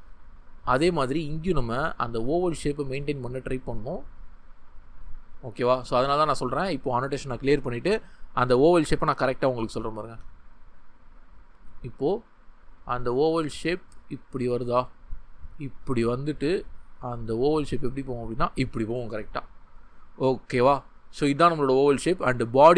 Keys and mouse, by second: 5.4 ctrl+z.